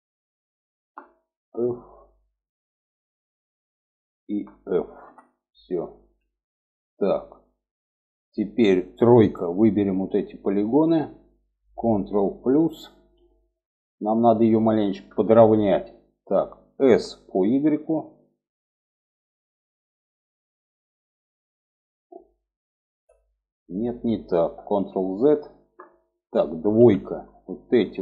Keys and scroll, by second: 4.3 f, 8.5 3, 12.1 ctrl+KP_Add, 16.2 s, 24.1 ctrl+z, 26.1 2.